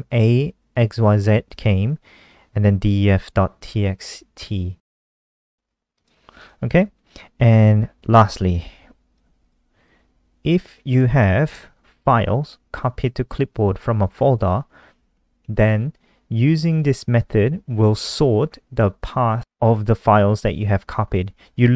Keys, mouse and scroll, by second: 5.7 click, 6.4-7.5 scroll down 3, 7.5 click, 9.0 ctrl+c, 9.2 click, 9.6 click, 11.3 ctrl+v, 15.2 ctrl+s, 16.9 click, 20.2 click, 21.6 click.